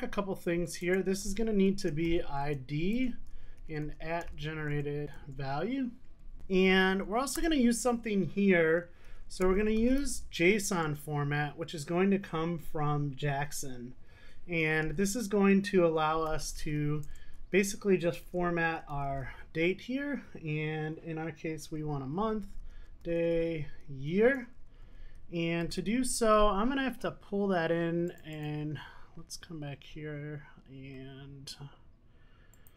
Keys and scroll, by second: 2.5 Return, 4.2 super+z, 5.2 Return, 10.9 Return, 17.1 Return, 25.8 super+s.